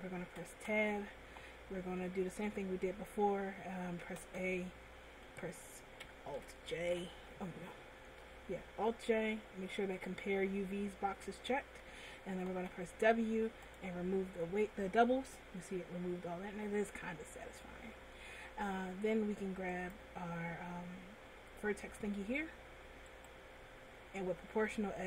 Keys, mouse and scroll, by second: 1.2 Tab, 4.5 a, 7.5 alt+j, 12.7 w, 20.2 click, 23.5 right click.